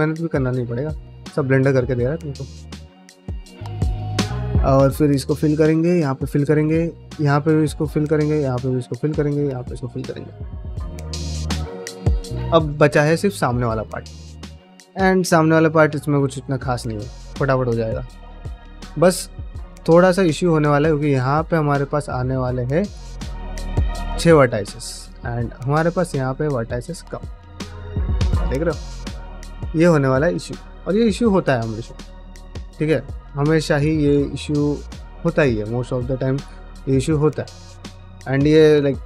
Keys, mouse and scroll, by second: 0.1 ctrl+r, 1.0 middle click, 2.0 middle click, 2.7 g, 3.2 middle click, 3.9 1, 4.0 click, 4.2 f, 4.9 2, 5.1 click, 5.2 f, 5.5 middle click, 6.0 middle click, 6.6 ctrl+r, 7.5 middle click, 7.9 1, 8.1 click, 8.3 f, 8.9 2, 9.1 click, 9.2 f, 9.4-10.8 middle drag, 11.0-12.2 middle drag, 12.4 shift+middle click, 12.8 ctrl+middle click, 13.1-17.1 middle drag, 18.1 middle click, 18.6 middle click, 19.2 middle click, 19.9 middle click, 21.0 1, 21.5 click, 21.7 middle click, 22.3 ctrl+click, 22.6 middle click, 24.6 middle click, 24.8 middle click, 26.0 click, 26.8 ctrl+click, 27.3-32.7 middle drag, 33.1-37.1 middle drag, 37.5 middle click.